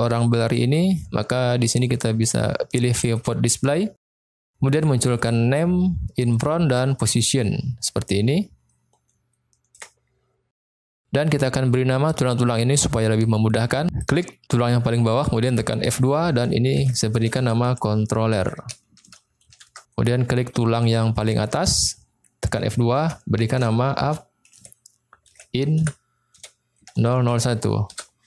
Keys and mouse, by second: 0.4 click, 3.0 click, 5.1 click, 6.3 click, 7.0 click, 9.3 shift+middle click, 13.9 click, 15.8 F2, 21.2 click, 22.5 F2, 27.0 0.